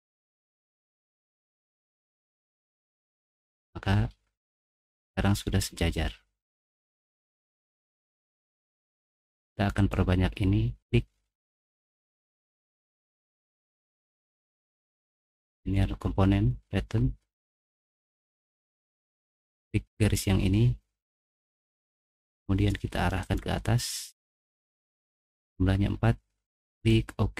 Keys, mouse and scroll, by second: 0.4 middle click, 0.4-1.0 scroll down 4, 0.7 middle click, 2.3 click, 3.3 scroll up 1, 3.5-5.6 middle drag, 5.8 middle click, 6.6 middle click, 7.8 middle click, 8.2 middle click, 9.1 middle click, 9.7 click, 12.6 click, 15.5 click, 20.0 click, 21.8-23.0 drag, 23.2 click, 24.1 middle click, 24.5 middle click, 24.5 scroll up 1, 25.1 middle click, 26.7 click.